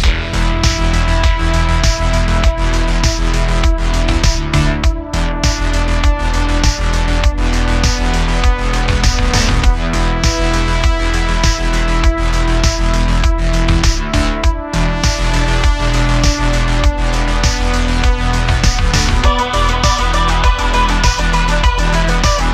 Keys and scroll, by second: 4.0 super+z, 6.3 super+b, 12.7 Tab, 13.1 s, 13.6 s, 13.7 x, 19.1 Tab, 22.2 s.